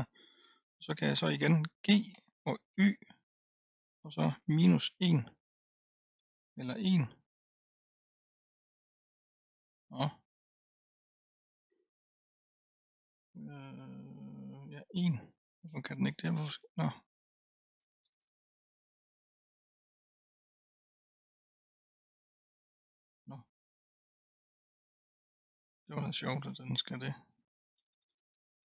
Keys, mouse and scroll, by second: 2.1 g.